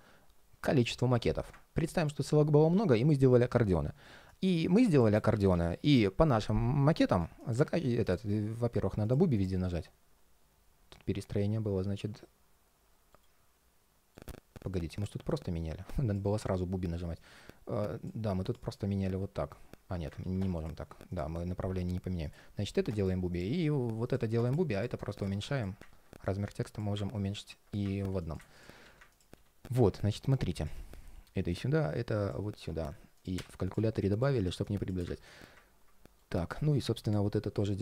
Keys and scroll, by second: 5.0 super+z, 12.9 ctrl+shift+3, 13.9 ctrl+shift+3, 19.9 super+z, 27.1 super+x, 28.1 super+space, 29.0 super+v, 30.6 alt+a, 35.9 ctrl+shift+3, 36.5 ctrl+shift+3.